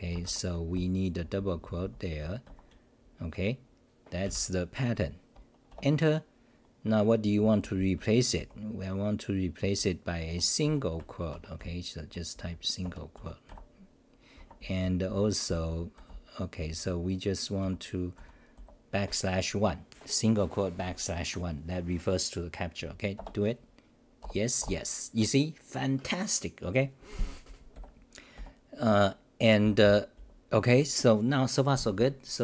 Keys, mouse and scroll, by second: 0.7-4.2 h, 4.2 ctrl+=, 5.7 Return, 7.6 Up, 8.0 Home, 8.4 n, 9.6 h, 10.2 Delete, 10.6 u, 11.3 Home, 11.6-12.3 n, 11.9 Home, 12.8 Delete, 13.1 u, 14.3 Home, 14.6-18.2 typing, 23.1 Return, 27.7 f, 28.3 f, 29.6-30.6 typing.